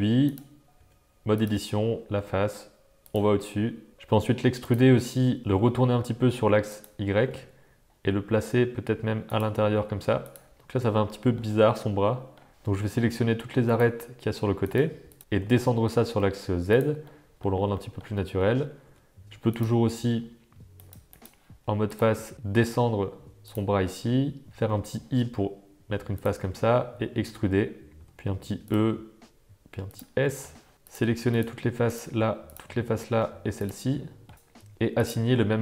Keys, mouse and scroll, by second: 0.7 Tab, 2.1 g, 3.9 g, 4.0 e, 5.4 r, 7.2 g, 9.6 g, 11.2 shift+click, 11.5 middle click, 11.6 click, 11.7 middle click, 13.7 click, 14.6 click, 15.2 g, 15.3 g, 17.2 click, 17.8 shift+click, 18.2 click, 18.8 Tab, 19.2 Tab, 19.5 click, 20.7 click, 21.1 click, 21.9 click, 22.3 g, 22.5 g, 24.6 i, 26.4 e, 28.8 s, 30.2 middle click, 30.8 click, 31.3 shift+click, 31.9 shift+click, 32.4 shift+click, 32.9 middle click, 33.9 middle click, 35.0-35.6 drag.